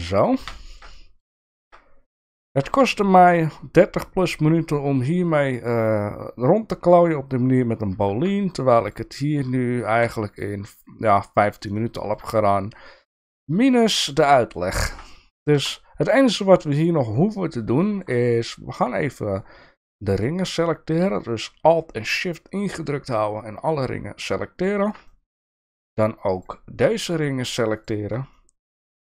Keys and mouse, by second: 0.5 shift+middle click, 0.9 middle click, 1.5 shift+middle click, 2.6 Tab, 8.1 Tab, 8.9 click, 9.9 Tab, 11.0 Tab, 11.7 shift+middle click, 14.2 middle click, 14.8 shift+middle click, 15.6 Tab, 16.1 middle click, 17.2 middle click, 17.8 shift+middle click, 23.8 middle click, 24.6 shift+middle click, 25.1 middle click, 28.3 middle click.